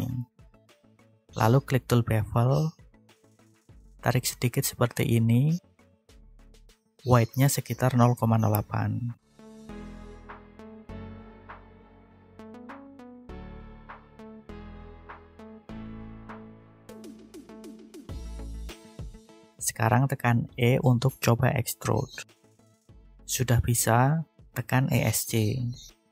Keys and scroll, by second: 11.6 8, 12.0 Return, 19.0 e, 25.0 Escape.